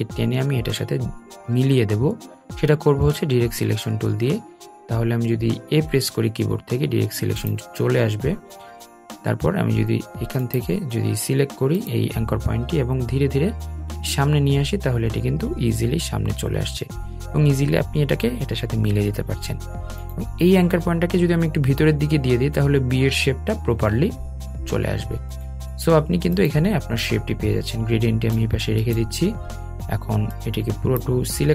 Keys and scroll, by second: 4.3 a, 19.6 Left.